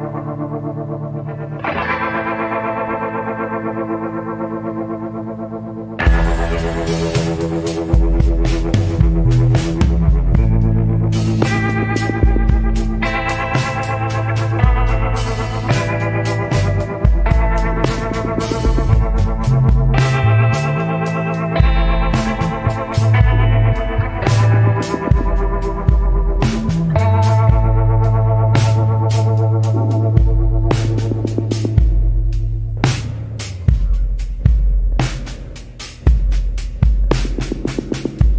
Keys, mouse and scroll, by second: 0.5-0.9 scroll up 1, 7.1 scroll up 1.